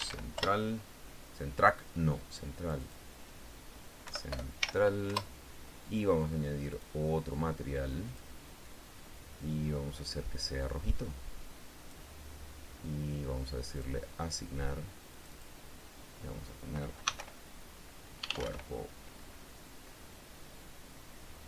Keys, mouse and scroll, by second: 0.0-0.4 typing, 0.7 Return, 2.9 click, 4.4 End, 4.7 BackSpace, 4.9 l, 5.4 Return, 7.1 click, 8.5 click, 10.3 click, 11.3-12.4 drag, 14.1 click, 15.5 click, 17.4 c, 17.5 u, 18.5 e, 18.6 r, 18.8 o.